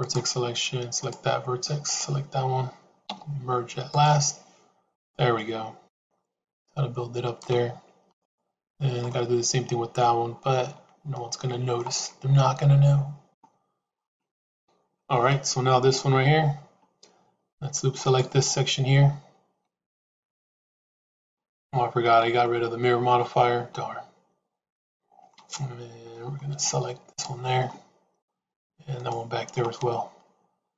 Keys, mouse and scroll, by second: 0.8 click, 1.7 shift+click, 2.9 m, 5.2-7.3 middle drag, 8.0 click, 9.0-11.7 middle drag, 12.2-13.3 middle drag, 14.4 KP_3, 17.9 alt+click, 19.8 alt+shift+click, 21.4 alt+shift+click, 23.1-25.2 middle drag, 26.0 middle click, 27.5 middle click, 28.9 shift+click, 29.5-30.7 middle drag.